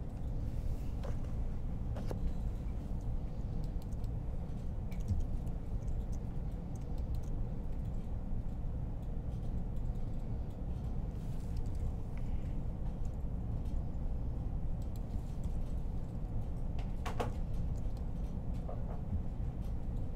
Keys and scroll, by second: 5.2 1, 12.9 r, 15.3-16.8 typing.